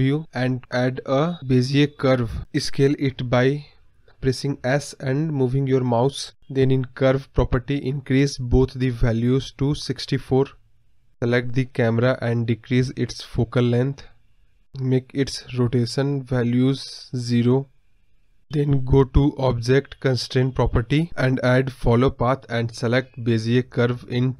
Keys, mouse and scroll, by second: 0.0 KP_7, 6.0-8.5 drag, 11.2 scroll up 2, 11.5-13.2 middle drag, 13.2 click, 15.6-21.0 drag, 21.5-23.8 drag.